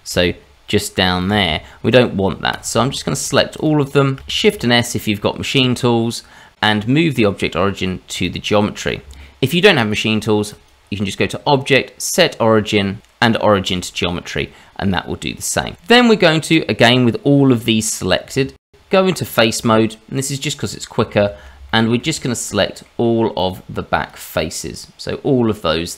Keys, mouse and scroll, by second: 0.1 g, 2.5 click, 2.9 shift+click, 3.2 click, 3.5 click, 3.9 shift+click, 4.4 shift+s, 10.5 click, 14.9 middle click, 16.1 click, 16.3 scroll down 1, 16.6 shift+middle click, 16.9-18.0 scroll up 2, 18.6 Tab, 19.9 middle click, 21.1 shift+z, 21.7 shift+middle click, 22.1 middle click, 23.4 click, 24.5 middle click.